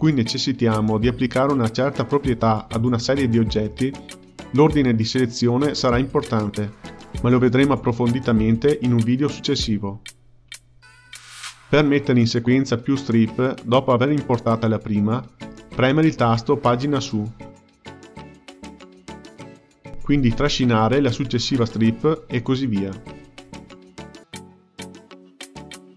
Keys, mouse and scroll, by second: 12.9 click, 13.1 click, 15.7-16.8 drag, 19.7 Page_Up, 21.9-23.1 drag, 23.8 Page_Up, 24.2 click, 24.8 Page_Up, 25.2 click, 25.7 Page_Up.